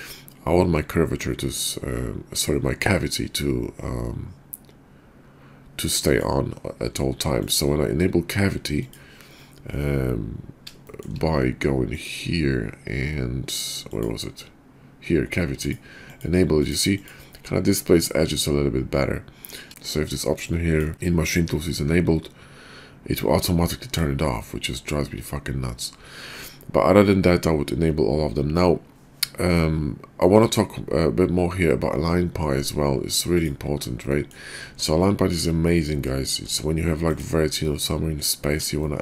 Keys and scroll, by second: 34.6 Tab, 36.3 g.